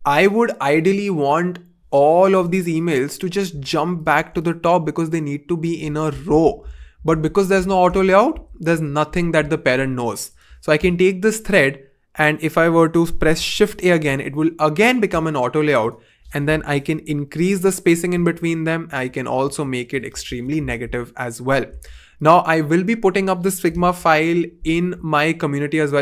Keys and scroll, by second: 6.3 super+z, 6.6 super+z, 7.1 super+z, 13.4 shift+a, 17.1 shift+Up, 17.3 shift+Up, 18.1 shift+Down, 18.3 shift+Down, 18.5 shift+Down, 20.2 super+z, 20.8 super+z, 21.7 super+z, 23.9 BackSpace.